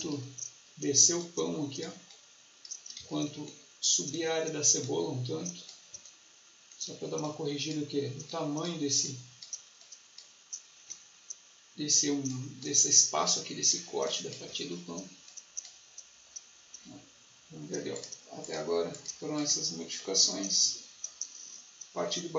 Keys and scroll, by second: 2.9 ctrl+z.